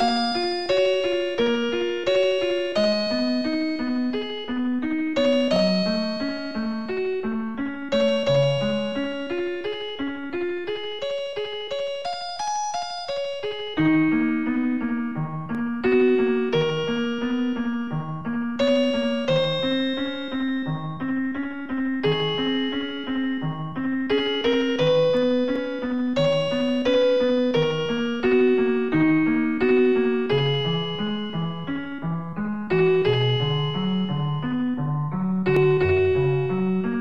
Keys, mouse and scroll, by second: 5.0 0, 6.1-6.6 typing, 8.3 ctrl+s, 8.5 click, 9.3 right click, 9.7 Tab, 10.1 click, 10.9 ctrl+s, 11.1 click, 11.6 a, 12.5 scroll up 1, 13.5-14.8 typing, 16.5 right click, 17.1 right click, 18.9 scroll down 3, 19.8-21.4 typing, 22.8 right click, 23.9 right click, 24.5 right click, 25.2-28.5 typing, 29.3 scroll up 2, 29.5 scroll down 1, 30.0 right click, 32.1 right click, 32.7 middle click, 33.5 right click, 34.7 right click, 36.3-36.7 typing.